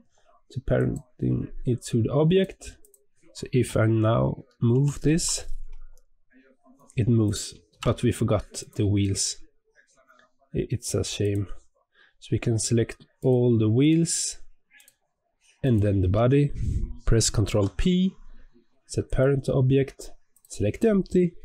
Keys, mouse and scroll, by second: 2.2 click, 2.7 click, 4.6 g, 7.6 ctrl+z, 8.5 click, 9.3-9.7 scroll up 3, 9.7-11.1 scroll down 1, 11.1 click, 13.1 shift+click, 13.7 shift+click, 14.7 shift+click, 15.5 shift+click, 17.4 ctrl+p, 20.2 click.